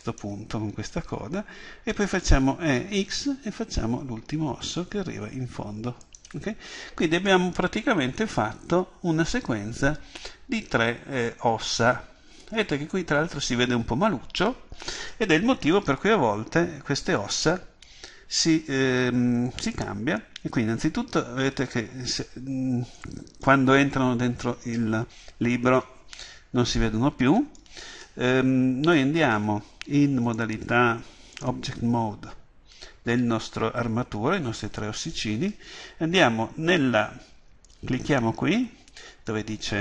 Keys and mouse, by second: 0.2-6.2 drag, 6.2-11.9 middle drag, 16.5 KP_1, 17.9 KP_3, 30.3-31.9 drag, 38.1-39.8 drag.